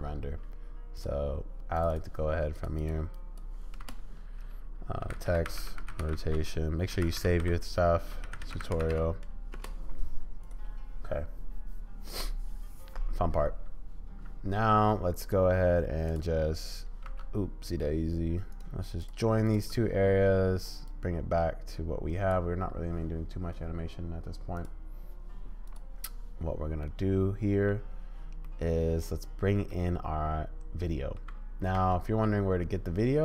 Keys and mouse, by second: 15.3-17.2 drag, 18.7 click, 20.9-22.4 drag, 26.8 click, 27.0-27.6 middle drag, 27.6 click, 28.4-29.0 middle drag, 29.7-31.2 middle drag.